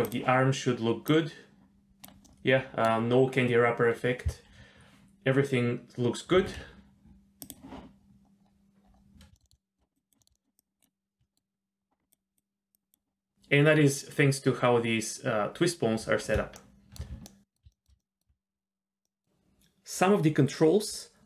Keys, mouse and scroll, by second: 0.1 click, 1.1-2.1 drag, 2.2-2.9 middle drag, 6.5 alt+r, 7.5 click, 8.5-9.1 scroll down 3, 9.3-9.8 shift+middle drag, 9.9 drag, 10.2 shift+middle click, 10.3 middle click, 10.6 click, 11.2 shift+middle click, 12.2 scroll down 1, 12.3 click, 12.7 click, 13.0 scroll down 3, 13.2 scroll up 1, 16.6-17.0 shift+middle drag, 17.3 ctrl+middle click, 17.7 shift+middle click, 18.0 ctrl+middle click, 19.0 middle click, 20.6-21.0 scroll up 4.